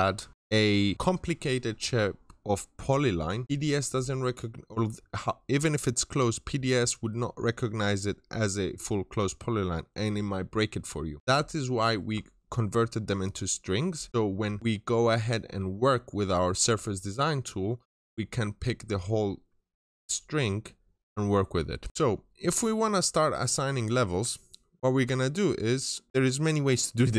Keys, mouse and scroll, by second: 11.2 scroll up 1, 21.9 middle click, 23.9-27.1 scroll down 1.